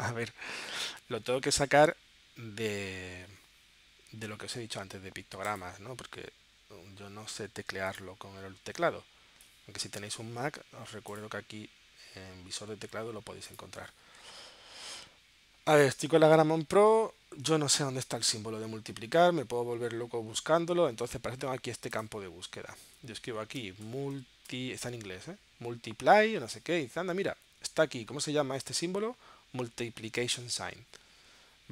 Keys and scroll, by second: 23.4-25.0 typing.